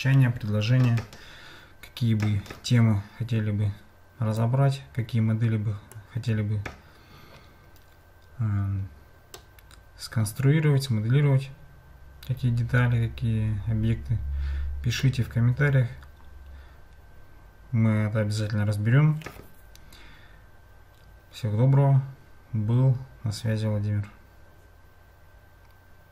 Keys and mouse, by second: 4.4-6.0 drag, 9.5-15.1 middle drag.